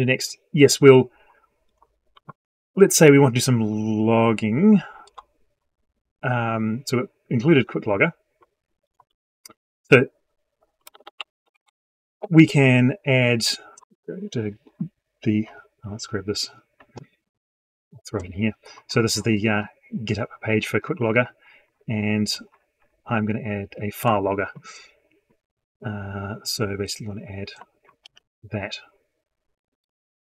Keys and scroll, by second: 27.9 ctrl+c.